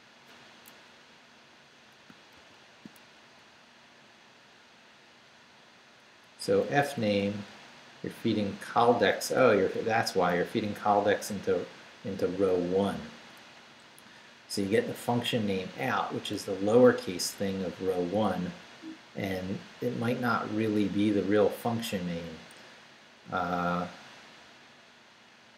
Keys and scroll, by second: 2.3 ctrl+f, 3.1 ctrl+Down, 6.3 Up, 7.2 Right, 9.5 Right, 18.0 Right.